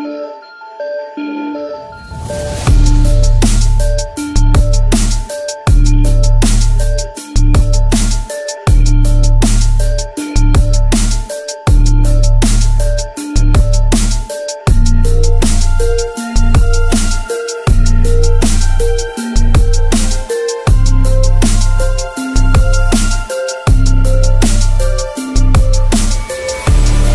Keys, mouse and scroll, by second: 0.9 shift+drag, 1.8 s, 2.0 x, 3.0 ctrl+b, 8.4 alt+click, 9.2 2, 10.0 click, 12.2 click, 13.2 z, 14.1-14.8 drag, 15.3 middle click, 15.8 click, 19.4 click, 19.6 Tab, 19.9 click, 20.2 alt+z, 20.6 click, 20.6 middle drag, 20.8 click, 20.8 middle click, 21.5-22.7 drag, 22.7-23.1 drag, 23.8 click, 24.5 click, 24.7 Tab, 25.3 click, 25.7 click, 26.6 ctrl+KP_Add, 26.6 3, 26.9 ctrl+KP_Add, 27.0 ctrl+KP_Add.